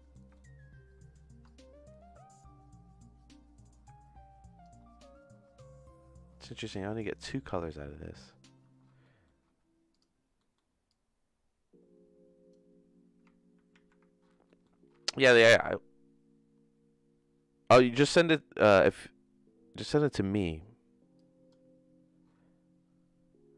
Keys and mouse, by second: 0.2 middle click, 1.5-4.6 shift+drag, 9.0 middle click, 10.5 middle click, 10.9-12.5 drag, 13.7 ctrl+z, 14.6 middle click, 20.3 click, 21.1 click.